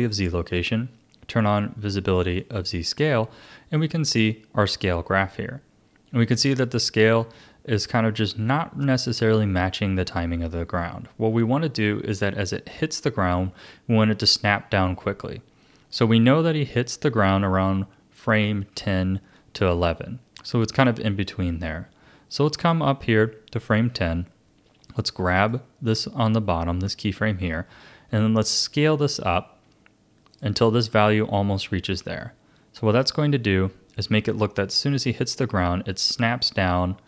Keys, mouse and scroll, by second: 2.4 click, 4.0-7.1 drag, 24.9 click, 28.1 s, 32.9-35.9 drag.